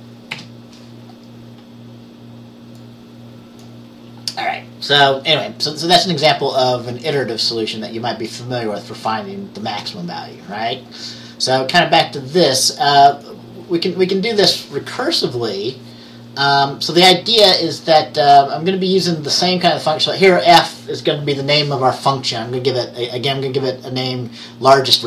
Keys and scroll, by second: 0.5 F5.